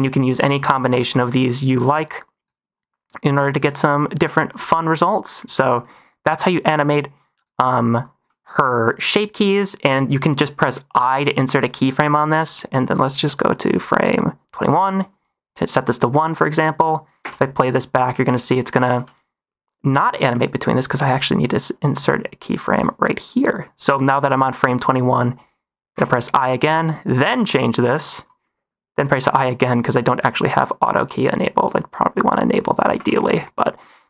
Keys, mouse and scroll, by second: 0.3 middle drag, 0.9 middle drag, 1.7 click, 3.6-4.3 drag, 4.9 middle click, 6.3 drag, 7.1 click, 8.2 middle click, 9.3 middle click, 11.2 i, 12.2 click, 14.9-16.0 drag, 17.1 space, 19.0 space, 19.6 click, 22.5 click, 25.9 i, 26.6 click, 29.1 i, 29.3 i, 31.5 click, 32.8 space, 33.3 middle click.